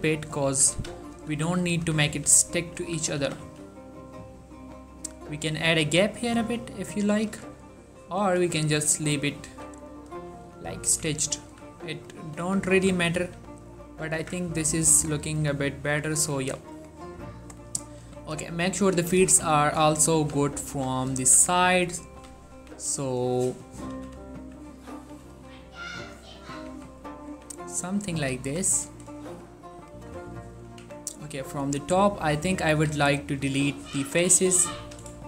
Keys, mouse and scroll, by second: 0.1 Tab, 0.6-3.6 typing, 1.6 right click, 2.7 right click, 7.2 click, 7.4 Tab, 7.8 scroll down 1, 8.3 click, 9.0 middle click, 9.6 1, 10.3 scroll up 1, 10.6 ctrl+middle click, 11.0 z, 11.6 z, 12.1 click, 12.6 Tab, 12.9 s, 13.3 x, 14.1 click, 14.3 Tab, 15.3 ctrl+middle drag, 15.5 click, 16.2-16.6 ctrl+middle drag, 16.8-18.1 shift+middle drag, 18.1 3, 18.4-18.7 scroll up 2, 18.9-19.2 ctrl+middle drag, 19.3 shift+middle click, 20.1 click, 20.3 z, 20.8 s, 21.2 t, 21.9 right click, 22.3 s, 22.6 y, 23.6 click, 24.1-25.4 typing, 26.1-26.8 drag, 26.8-27.4 typing, 28.4 ctrl+middle drag, 28.5-28.9 ctrl+scroll up 2, 28.9 click, 29.4-29.9 shift+middle drag, 29.9 click, 30.2 z, 30.5 ctrl+middle click, 30.9 Tab, 31.4 click, 32.5-35.2 typing, 34.4 click.